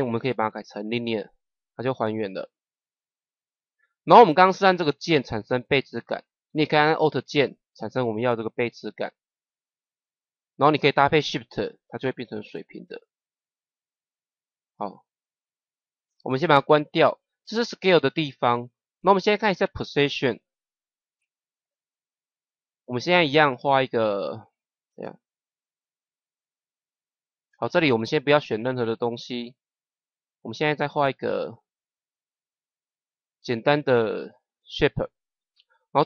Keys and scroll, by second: 25.1 ctrl+z.